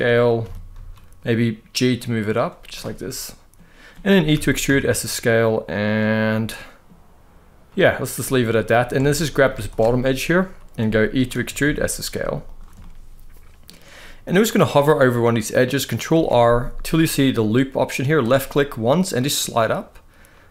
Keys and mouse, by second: 0.1 g, 0.4 z, 2.0 click, 2.4 middle click, 4.0 e, 4.3 s, 5.5 click, 5.8 middle click, 7.3 middle click, 8.2 middle click, 8.6 alt+a, 9.6 middle click, 11.0 e, 11.3 s, 12.1 click, 12.5 middle click, 13.7 middle click, 15.8 ctrl+r.